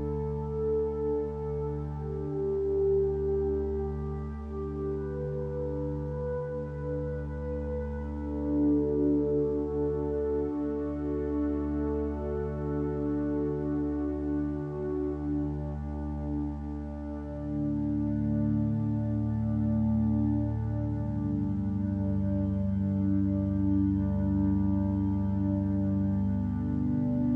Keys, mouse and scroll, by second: 21.3 b, 26.4 ctrl+space.